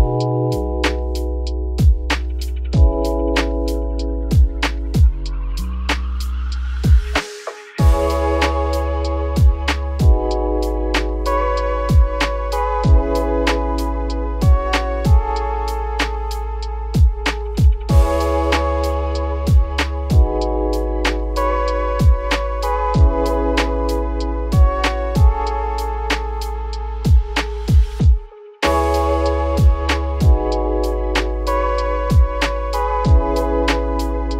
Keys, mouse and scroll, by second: 0.9 shift+click, 1.3-2.4 shift+middle drag, 2.4 shift+click, 3.0 g, 4.7 Tab, 4.9-5.6 scroll down 10, 5.6 click, 6.0-6.4 shift+middle drag, 6.4 click, 6.7-7.2 scroll up 1, 7.2 ctrl+s, 29.8-30.1 scroll down 2, 30.1-33.2 shift+middle drag, 33.2 Tab, 33.5 `.